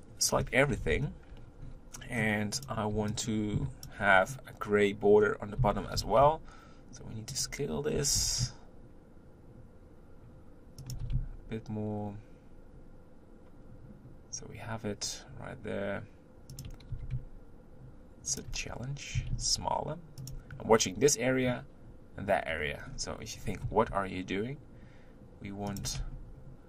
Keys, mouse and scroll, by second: 0.8 ctrl+l, 1.9-2.5 scroll down 5, 2.5 click, 2.9 b, 4.1 scroll up 3, 5.6 s, 7.9 g, 11.0 s, 16.9 g, 19.4 s, 22.8-23.5 scroll up 5, 23.6 g, 26.0 Tab.